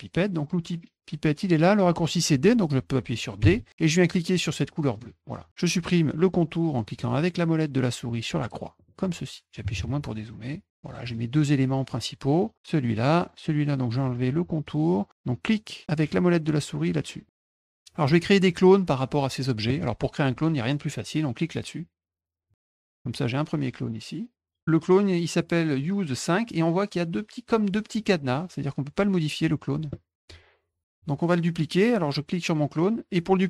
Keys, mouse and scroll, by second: 4.9 click, 8.7 middle click, 10.5 middle click, 11.0 click, 11.9-12.5 drag, 12.9 click, 17.2 middle click, 22.4 click, 22.9-24.6 drag, 30.9-33.4 drag.